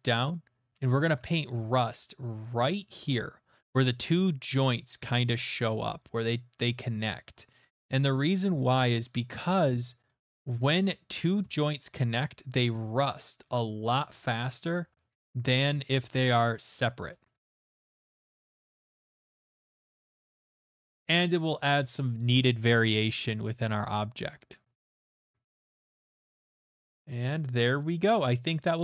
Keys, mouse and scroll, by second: 0.3 click, 1.0 ctrl+z, 1.4 middle click, 1.7 shift+middle click, 1.9 middle click, 2.4 shift+middle click, 5.9 click, 6.7 click, 7.4 click, 7.6 middle click, 7.8 shift+middle click, 8.4 click, 9.5 middle click, 10.1 click, 10.6 middle click, 12.0 click, 12.3 click, 13.0 middle click, 13.6 click, 13.9 click, 14.5 shift+middle click, 15.1 shift+middle click, 15.6 click, 15.9 click, 16.2 click, 16.7 middle click, 17.0 shift+middle click, 17.6 click, 17.8 click, 18.1 click, 18.3 middle click, 18.5 middle click, 18.6 shift+middle click, 18.7 click, 18.8 click, 19.1 shift+click, 19.2 shift+click, 19.2 shift+middle click, 19.3 shift+middle click, 19.5 click, 19.8 click, 19.9 shift+middle click, 20.1 middle click, 20.3 click, 20.5 middle click, 21.3 click, 21.6 shift+middle click, 21.9 middle click, 23.5 shift+middle click, 23.9 click, 24.6 middle click, 24.8 shift+middle click, 24.9 click, 25.1 middle click, 25.3 shift+middle click, 25.5 click, 25.6 middle click, 26.1 middle click, 26.3 click, 26.4 click, 26.6 click, 26.8 middle click, 27.1 middle click, 28.5 middle click.